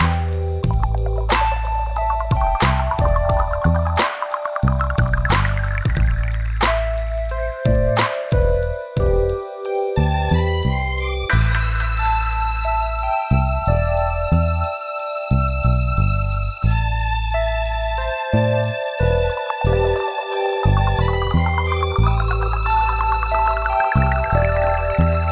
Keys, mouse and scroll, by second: 0.4 click, 2.3 click, 2.9 click, 4.7 click, 4.8 click, 6.4 click, 7.2 click, 9.0 click, 10.1 click, 11.1 click, 12.6 scroll up 3, 14.2 click, 15.6 click, 19.0 scroll up 2, 19.6 click, 21.0 click, 21.6 click, 22.6 scroll down 1, 24.7 click.